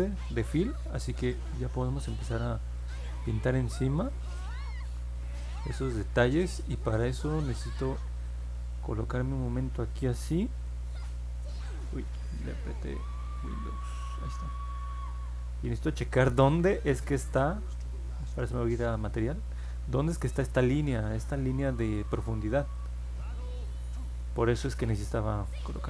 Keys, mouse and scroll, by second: 1.2 click, 3.4 middle click, 3.9 scroll up 2, 4.8 scroll up 2, 5.3 scroll down 2, 8.2 click, 10.6 super+click, 12.8 click, 13.8-17.2 alt+drag, 18.2 click, 19.0 click, 19.7 middle click, 20.9 middle click, 22.7-23.8 alt+drag, 24.3 alt+middle click, 25.1 middle click.